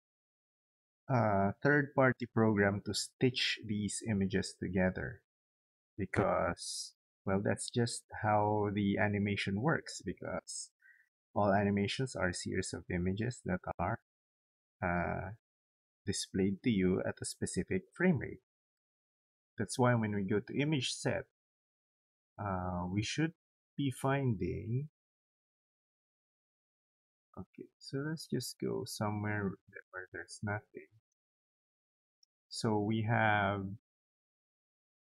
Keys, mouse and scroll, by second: 20.9 click, 24.4 click, 28.2 click, 30.7 click, 31.8-33.4 drag.